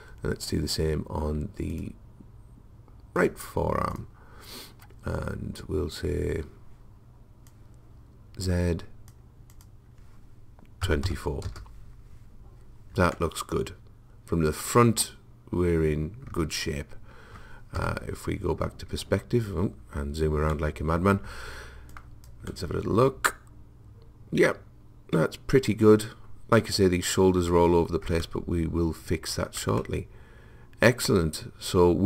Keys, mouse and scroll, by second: 1.8-5.8 drag, 7.5 click, 9.5 click, 13.2 middle click, 14.4 middle click, 17.8 KP_5, 18.7 middle click, 21.9 middle click, 22.8 click, 23.7 middle click, 28.2-31.8 middle drag.